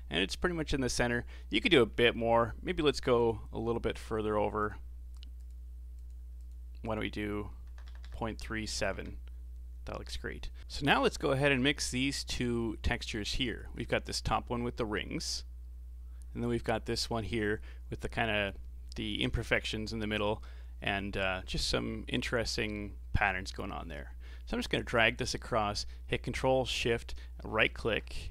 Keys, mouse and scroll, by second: 3.2 click, 6.3 click, 7.8 BackSpace, 10.6 middle click, 11.0 middle click, 11.6-12.0 scroll down 3, 13.4 ctrl+shift+click, 16.7 ctrl+shift+click, 24.7 click, 26.9-28.3 ctrl+shift+right drag.